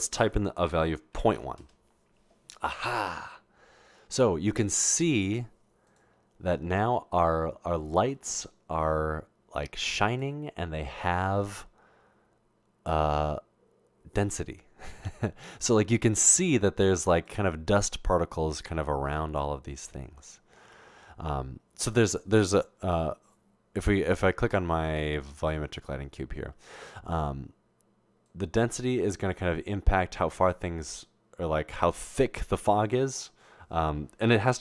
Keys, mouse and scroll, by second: 1.6 Return, 1.6 typing, 28.3-32.1 drag, 32.5 click.